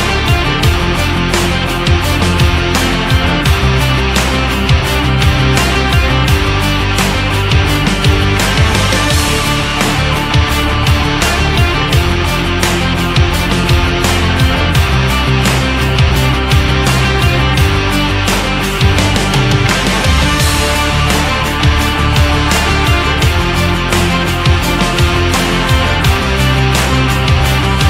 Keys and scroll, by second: 14.5 ctrl+z.